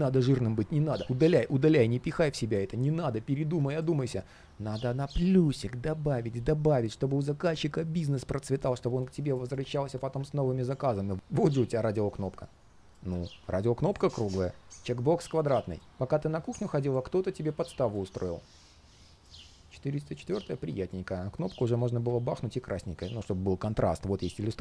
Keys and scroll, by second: 11.0 typing, 19.2 super+space.